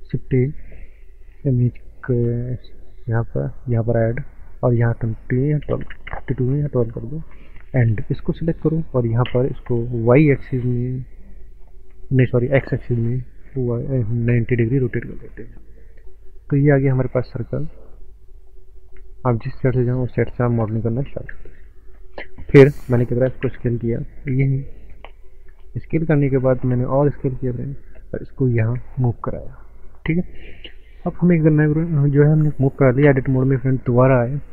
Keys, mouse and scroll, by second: 0.0 shift+a, 3.0 click, 5.7 KP_1, 6.1 KP_2, 6.1 KP_Enter, 7.6 click, 8.1 click, 9.3 r, 12.7 x, 14.1 KP_9, 14.7 KP_Enter, 15.9 scroll down 1, 16.5-17.2 scroll down 5, 17.2 click, 17.3 click, 20.2 scroll up 5, 21.1 ctrl+space, 21.9 shift+middle click, 23.5 s, 25.0 click, 25.2 scroll up 1, 25.6 shift+middle click, 26.2 shift+middle click, 26.8 s, 27.7 click, 33.1 Tab.